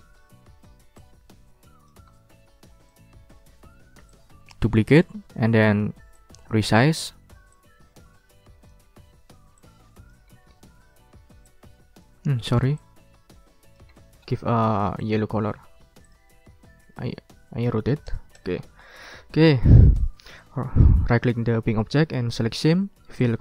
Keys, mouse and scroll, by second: 1.0-2.0 drag, 2.3 ctrl+scroll down 2, 2.8 ctrl+click, 3.3 ctrl+click, 3.8 ctrl+d, 4.0-5.2 ctrl+drag, 6.1 ctrl+click, 7.5-8.8 drag, 9.5 ctrl+click, 10.4-10.9 ctrl+scroll down 4, 10.5 ctrl+click, 11.1 ctrl+d, 11.4 ctrl+click, 12.1 ctrl+z, 13.9 scroll up 2, 14.0 scroll down 3, 15.0 click, 15.4 click, 16.0 click, 17.0-18.6 drag, 18.6 ctrl+scroll down 1, 18.8 ctrl+click, 19.6 ctrl+scroll up 1, 20.0 ctrl+click, 20.4 ctrl+right click, 23.2 click.